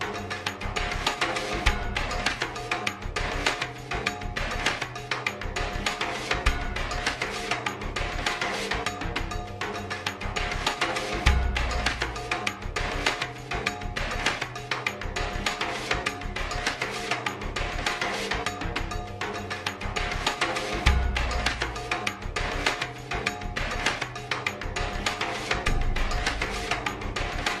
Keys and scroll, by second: 5.7 b, 5.9 Caps_Lock, 11.7 typing, 13.1 typing, 14.3-14.7 typing.